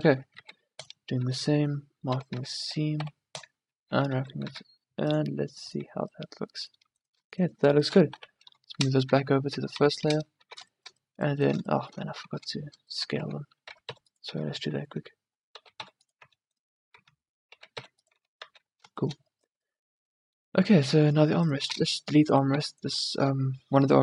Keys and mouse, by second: 0.5 ctrl+e, 2.3 a, 2.5 a, 3.1 u, 4.0 Tab, 4.3 z, 4.6 a, 8.2 m, 9.2 a, 9.8 1, 10.4 a, 12.4 Tab, 13.3 a, 13.8 s, 14.5 Tab, 15.2 Tab, 15.7 s, 16.4 Tab, 17.1 Tab, 17.7 s, 18.3 Tab, 18.6 a, 21.8-23.2 drag, 21.8 x, 22.7 x.